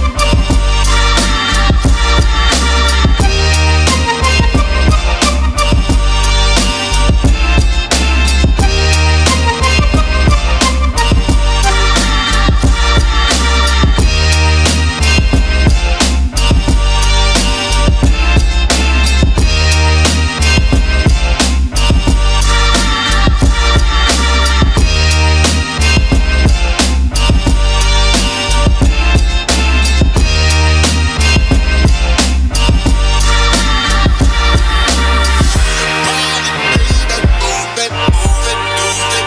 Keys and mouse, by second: 2.8 click, 3.9-11.7 drag, 13.0 click, 16.7 shift+click, 29.7 click, 30.9 click, 32.7 shift+click, 35.0 ctrl+a.